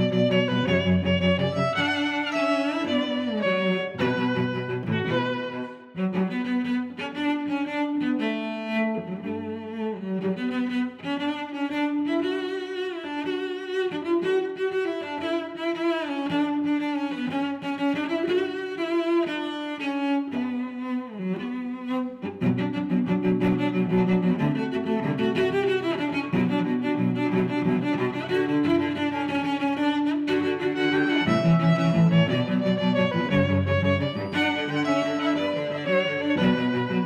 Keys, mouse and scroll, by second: 0.1 click, 4.2 middle click, 5.3 click, 10.5 click, 11.2 middle click, 14.4 middle click, 15.2 click, 17.4 click, 17.8 click, 18.3 middle click, 19.2 click, 19.8 click, 21.3 click, 21.8 middle click, 22.4 click, 23.7 middle click, 24.4 middle click, 25.6 click, 26.8 click, 29.0 click, 29.6 middle click, 30.9 click, 31.9 click, 32.2 click, 32.7 middle click, 33.4 click, 34.5 click, 34.9 click, 35.2 middle click, 36.4 middle click.